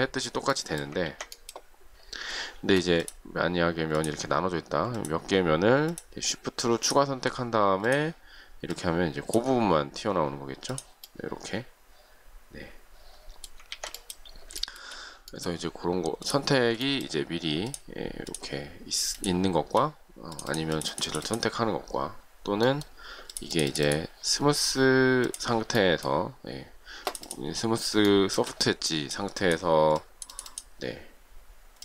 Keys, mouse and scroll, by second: 1.0 ctrl+z, 2.5 space, 3.9 shift+click, 5.7 shift+click, 6.7 shift+click, 14.5 shift+middle click, 16.7 shift+middle click, 17.5 shift+click, 18.2 shift+click, 19.0 shift+click, 28.0 shift+middle click.